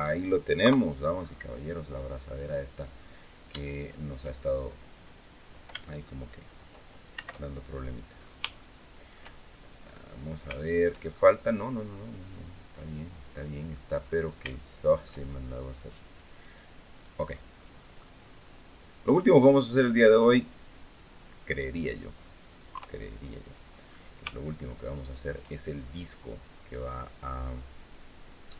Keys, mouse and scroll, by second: 0.4 KP_3, 1.0-1.3 scroll up 1, 2.9 scroll down 1, 3.4 shift+click, 6.9 shift+c, 7.5-8.2 scroll up 5, 8.3-9.4 shift+drag, 9.4 middle click, 10.3 shift+middle click, 10.9-13.7 shift+middle drag, 13.8-14.2 scroll up 1, 14.3 shift+middle click, 15.5 right click, 15.8 right click, 16.7 right click, 17.1 scroll down 1, 17.3 click, 20.0 click, 21.0 click, 22.5 KP_3, 23.5-23.9 scroll up 2, 24.1-25.2 shift+middle drag.